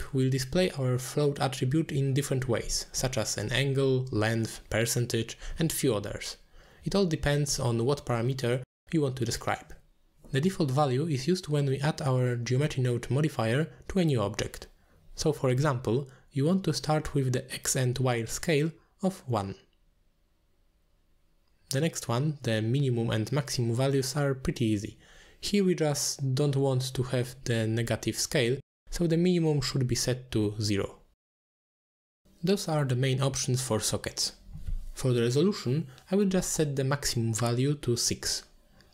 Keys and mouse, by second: 4.1 drag, 4.8-6.1 drag, 7.5-8.9 drag, 11.2-12.5 drag, 13.9 click, 15.2-17.7 drag, 19.2-20.5 drag, 21.9 click, 23.5 click, 24.0 click, 24.9 click, 26.4-28.0 drag, 28.9 click, 29.8 click, 32.2 click, 33.0-34.1 ctrl+drag, 34.3 click, 35.0-37.6 ctrl+drag, 38.1 click.